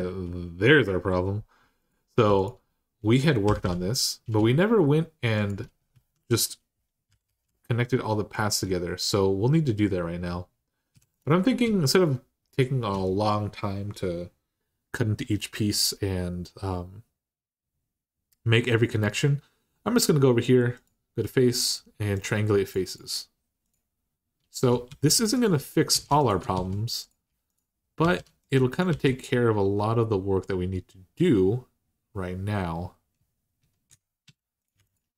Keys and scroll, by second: 3.2 g, 3.4 g, 5.7 1, 6.9 g, 7.0 g, 10.7 3, 24.7 r, 25.7 r, 26.3 r, 27.8 r, 28.7 r, 31.1 typing, 34.0 2.